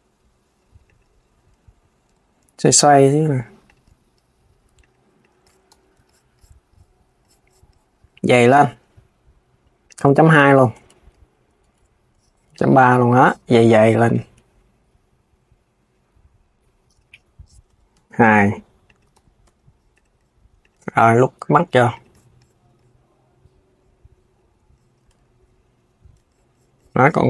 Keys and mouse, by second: 1.8 r, 3.6 g, 4.9 click, 5.4 KP_3, 9.5-12.2 drag, 16.5 click, 16.8 KP_1, 17.4 Tab, 18.8 KP_3, 19.1 Tab, 19.6 click, 20.3 click, 20.5 g, 21.6 click.